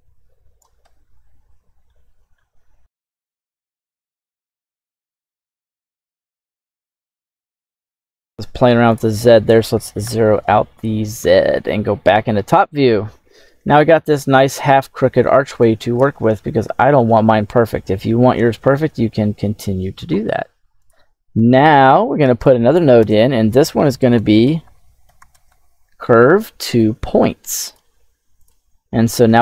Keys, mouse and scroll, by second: 1.0-1.7 scroll down 2, 1.7-2.2 shift+middle drag, 2.5-2.9 scroll up 5, 2.9 shift+middle drag, 3.1 scroll down 1, 3.5 click, 4.3 scroll down 1, 4.3 middle click, 4.6 click, 5.3 click, 5.7 ctrl+z, 5.8 middle click, 6.1-7.3 drag, 7.4 click, 8.0 click, 8.8-10.0 drag, 11.2-11.5 middle drag, 11.9 KP_7, 12.5-13.5 scroll up 2, 13.6-14.1 shift+middle drag, 14.1 scroll up 3, 15.5 click, 15.5 scroll up 1, 16.1-16.8 shift+middle drag, 17.4 KP_7, 18.3-18.7 shift+middle drag, 18.9 scroll down 1, 20.7 click, 22.2 right click, 22.9 space.